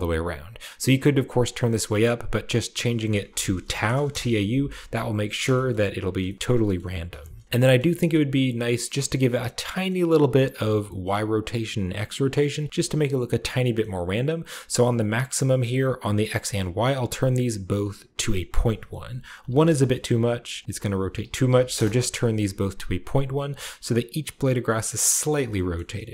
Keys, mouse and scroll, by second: 0.8-2.0 drag, 1.8 right click, 2.8 click, 3.2-3.6 typing, 3.9 Return, 4.9-5.4 scroll down 1, 5.4-6.5 shift+middle drag, 6.4-7.4 shift+scroll up 1, 6.6-7.4 middle drag, 6.6-7.9 typing, 7.4-8.6 scroll up 1, 7.6 shift+middle click, 8.6-9.5 shift+middle drag, 8.8-9.4 shift+scroll up 1, 9.4-11.2 scroll up 1, 9.7-14.5 middle drag, 11.4 shift+right click, 11.4 typing, 11.6 shift+right click, 15.8 click, 16.1-16.8 typing, 16.2 click, 16.6 click, 19.2 typing, 19.5 Return, 20.4 click, 21.1-21.8 typing, 22.9 scroll down 1, 23.3 scroll up 1, 25.0 scroll down 1, 25.6-26.1 shift+middle drag, 25.8 shift+scroll down 1.